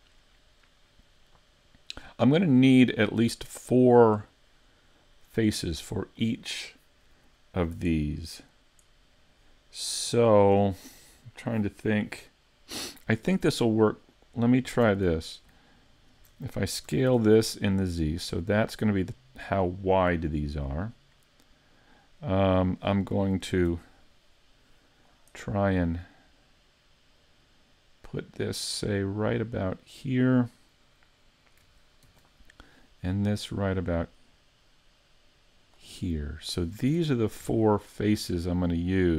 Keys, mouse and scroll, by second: 15.0 alt+right click, 16.0 alt+shift+right click, 16.9 s, 19.5 click, 23.7 ctrl+r, 30.0 click, 31.1 middle click, 32.1 ctrl+r, 35.7 click, 36.1 middle click, 37.0 ctrl+Tab, 38.0 right click, 38.4 shift+right click, 38.8 shift+right click.